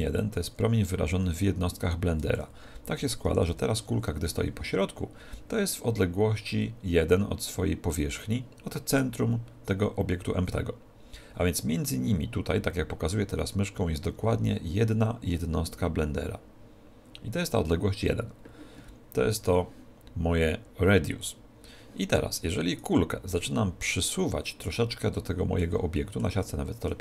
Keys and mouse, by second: 0.2 click, 3.2 alt+g, 8.9 right click, 19.4 right click, 22.8 right click, 24.0-27.0 middle drag.